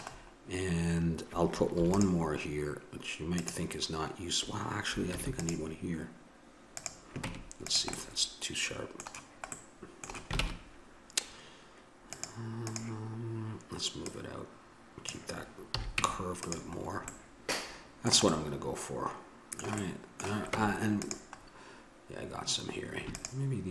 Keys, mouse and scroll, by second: 1.7 ctrl+r, 2.3 click, 5.1 ctrl+r, 7.3 Tab, 10.4 ctrl+Tab, 15.7 a, 16.0 Tab, 19.6 middle click, 20.5 Tab, 23.2-23.7 drag.